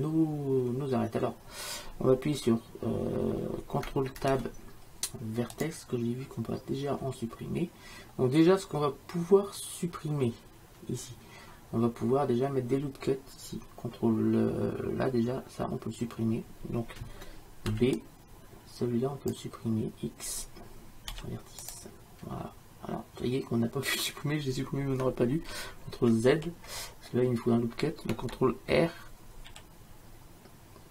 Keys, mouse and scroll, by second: 4.3 ctrl+Tab, 17.8 b, 21.2 x, 26.4 ctrl+z, 29.5 ctrl+r.